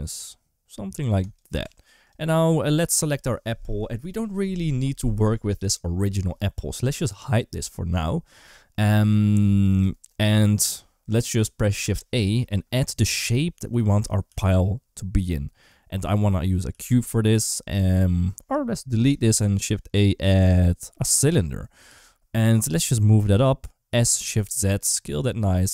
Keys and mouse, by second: 1.0 typing, 1.5 Tab, 1.9 click, 12.0 shift+a, 14.1 g, 16.5 g, 18.8 Delete, 19.0 shift+a, 21.7 g, 23.7 s.